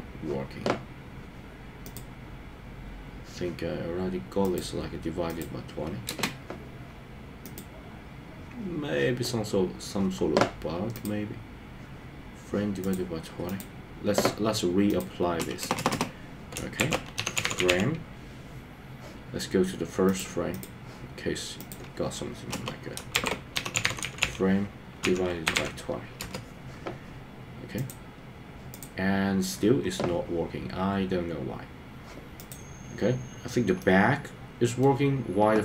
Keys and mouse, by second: 1.9-4.5 drag, 6.1 space, 11.0-12.9 drag, 14.9-20.2 drag, 15.6 BackSpace, 16.1 BackSpace, 20.6 click, 21.7-26.3 drag, 27.9 click, 33.8-34.9 middle drag.